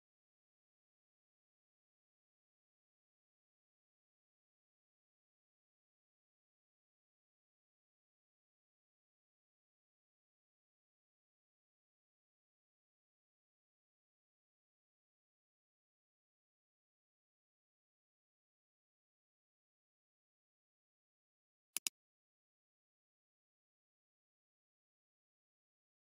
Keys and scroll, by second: 20.7 [.